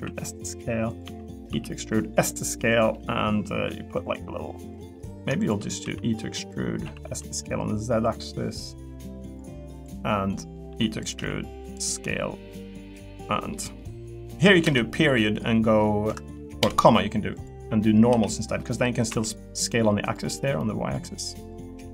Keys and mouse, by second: 0.9 click, 1.0 e, 1.3 click, 1.5 s, 2.9 middle click, 4.1 click, 4.6 click, 4.9 middle click, 5.8 e, 6.8 s, 7.0 z, 8.0 click, 10.7 e, 11.0 click, 11.1 s, 11.6 click, 12.9 middle click, 13.7 middle click, 18.1 s, 19.1 y, 20.3 middle click, 21.0 click, 21.6 click.